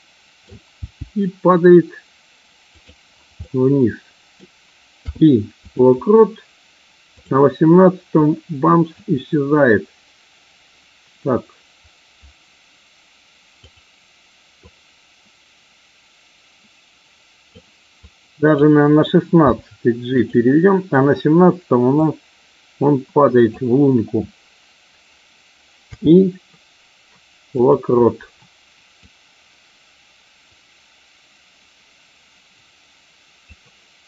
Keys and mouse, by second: 0.6 g, 3.3-4.3 middle drag, 7.1 click, 8.1 click, 13.6 click, 14.7-17.5 drag, 18.0-18.5 drag, 19.5 g, 22.0-23.5 drag, 25.8 i, 29.1-33.5 drag.